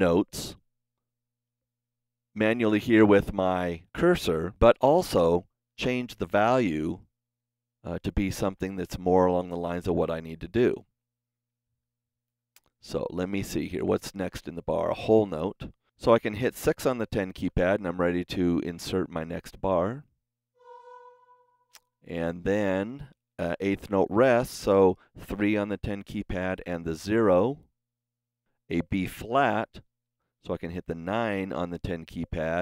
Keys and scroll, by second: 7.2 KP_3, 8.4 KP_0, 11.6 KP_0, 15.2 Escape, 15.7 KP_6, 25.2 KP_3, 26.5 KP_0, 30.1 KP_9.